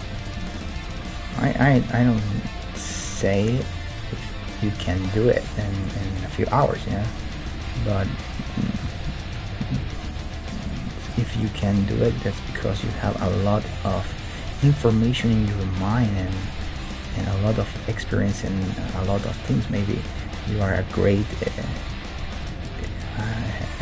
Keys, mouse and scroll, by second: 1.6 Tab, 3.5 middle click, 5.6-8.7 middle drag, 6.2 Tab, 7.3-9.2 right drag, 7.8 g, 8.8 g, 9.8 g, 10.7-13.2 middle drag, 11.7-13.7 right drag, 12.0 g, 13.5-16.6 middle drag, 14.1 g, 15.1-23.3 right drag, 15.4 g, 16.6 g, 17.7 g, 19.0 g, 20.0 g, 21.7 g, 22.8 g, 23.2 middle click.